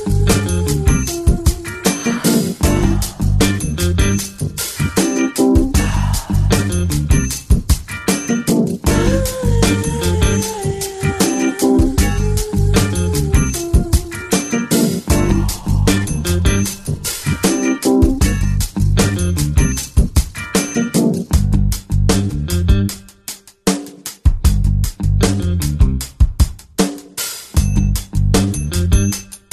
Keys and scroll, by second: 20.3 Up.